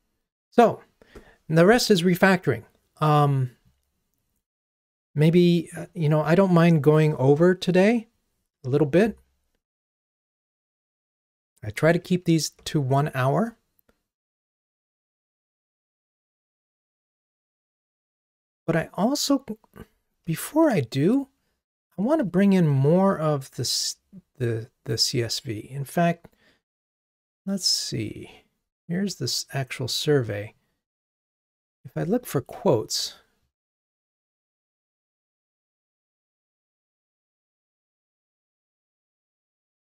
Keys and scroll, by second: 11.1 super+1, 22.2 super+1, 32.0 super+f, 36.4 super+1.